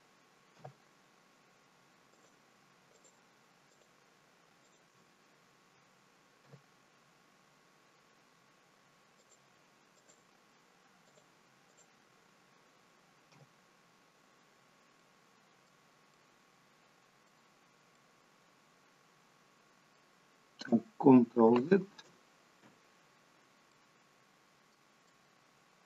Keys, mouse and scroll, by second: 0.6 f, 2.1 click, 3.0 shift+click, 3.7 click, 4.7 click, 6.5 f, 9.2 click, 10.0 shift+click, 11.1 shift+click, 11.7 shift+click, 13.4 f, 15.3 middle click, 16.2 middle click, 17.6-18.0 scroll down 2, 18.0 middle click, 21.6 ctrl+z, 23.8 middle click, 25.4 middle click.